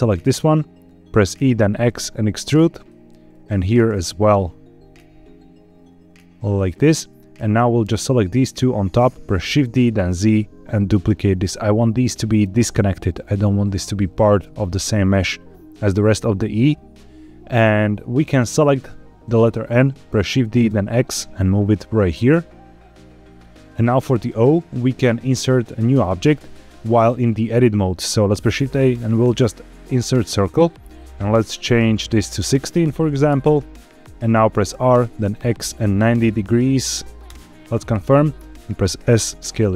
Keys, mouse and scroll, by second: 1.2 e, 1.5 x, 2.7 click, 3.2 click, 3.8 e, 4.0 x, 6.5 click, 7.4 click, 9.5 shift+d, 9.9 z, 11.3 click, 17.9-19.3 drag, 20.2 shift+d, 20.6 x, 23.5 click, 28.1 shift+a, 31.4 click, 32.1-33.2 drag, 34.6 r, 35.8 x, 35.8 KP_9, 35.9 KP_0, 37.2 KP_Enter, 38.3 s.